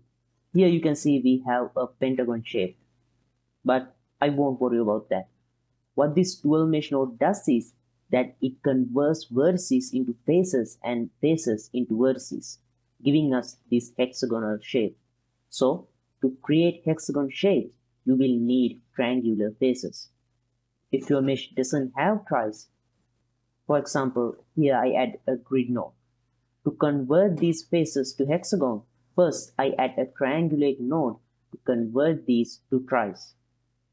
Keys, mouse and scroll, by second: 0.6-1.5 ctrl+middle drag, 1.9 middle click, 5.8-6.7 ctrl+middle drag, 7.2-16.7 middle drag, 22.8 shift+a, 25.4 alt+shift+click, 25.8 click, 26.0 click, 26.5 click, 27.0 ctrl+middle click, 27.7 click, 28.9-31.6 drag, 33.2 alt+shift+click.